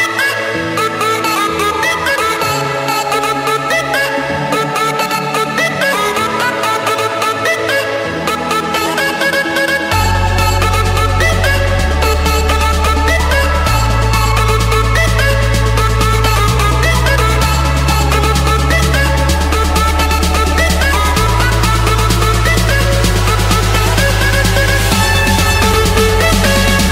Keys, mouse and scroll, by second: 0.5 click, 0.8-1.4 scroll down 6, 1.4 scroll up 2, 1.5-2.7 scroll down 11, 2.7 scroll up 10, 3.0 scroll down 12, 3.5 Escape, 4.8-6.1 typing, 7.3 Return, 11.1-12.2 drag, 12.7 typing, 13.2 Return, 14.2-16.4 typing, 15.3 Return, 16.7 Return, 17.7 Return, 18.4 Return, 19.7 middle click, 19.7-20.9 scroll down 3, 20.9 scroll down 1, 21.9-22.2 scroll up 3, 23.8 click, 26.2 click.